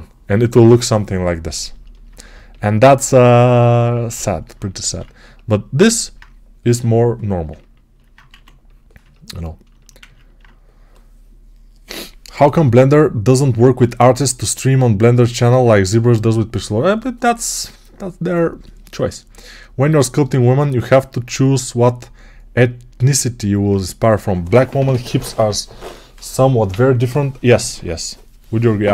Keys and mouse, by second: 4.7 ctrl+z, 8.1 1.